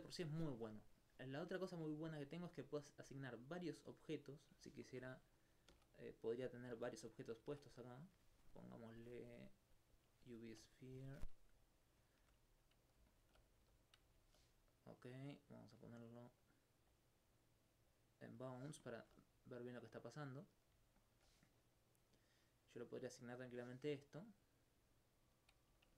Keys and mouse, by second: 4.9 alt+click, 5.7 shift+a, 7.2 click, 9.8 click, 10.4 alt+click, 11.2 alt+click, 12.0 click, 12.2 click, 13.1 alt+click, 13.6 alt+click, 13.8 click, 14.2 alt+click, 17.2 middle click, 17.7 click, 18.8 alt+click, 19.9 alt+click, 20.0 right click, 21.0 alt+click.